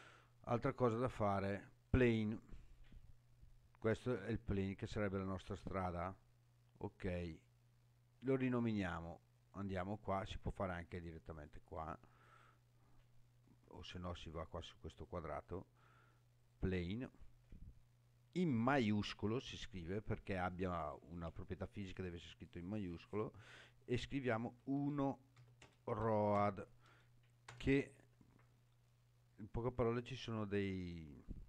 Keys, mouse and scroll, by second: 0.8 click, 1.7 click, 9.3 click, 11.1 click, 11.3-14.7 drag, 15.0 click, 16.4-28.5 drag.